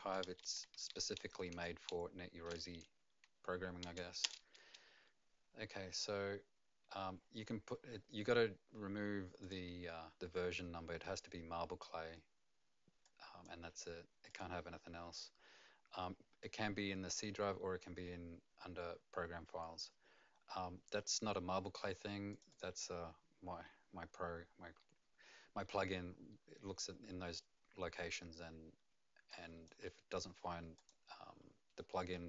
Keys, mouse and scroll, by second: 0.4 F2, 0.7 End, 1.2 BackSpace, 1.5 BackSpace, 4.2 Return, 9.4 click, 13.0 click, 14.3 click, 22.3 click, 22.5 click, 29.3 click, 30.7 click.